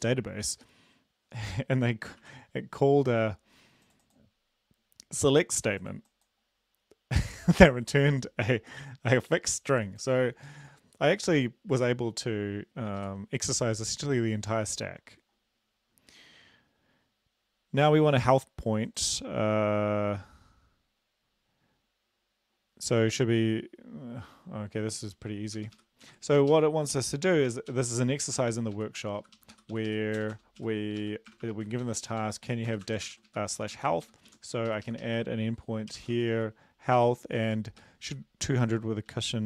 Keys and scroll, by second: 33.2 ctrl+v, 33.3 Up, 33.8 Up.